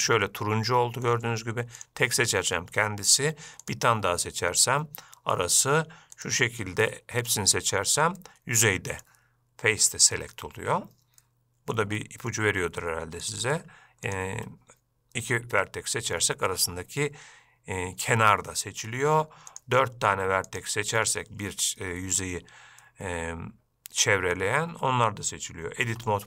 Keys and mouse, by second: 0.5 middle click, 3.8 shift+click, 7.5 shift+click, 8.4 middle click, 11.4 middle click, 12.2 shift+middle click, 13.4 click, 19.7 shift+click, 20.7 shift+click, 23.1-24.6 middle drag, 26.1 Tab.